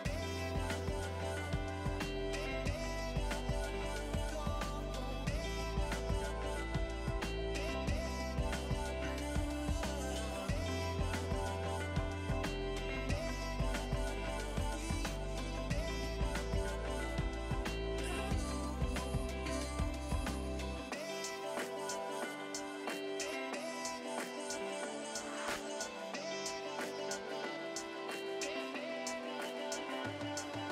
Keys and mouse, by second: 1.0 click, 1.4 ctrl+shift+x, 1.6 click, 2.2 Escape, 2.4 click, 4.1 click, 4.5 click, 5.7 Escape, 6.3 click, 7.8-8.5 typing, 8.2 click, 8.5 click, 10.2 click, 11.2 click, 11.5 x, 11.8 Return, 12.2 click, 17.6 click, 19.1 KP_2, 19.4 click, 21.3 click, 21.5 Escape, 21.8 click, 22.0 Delete, 22.2 click, 24.0 r, 25.0 click, 25.9 ctrl+1, 26.0 click, 29.1 click, 29.4 click, 30.3-30.7 typing.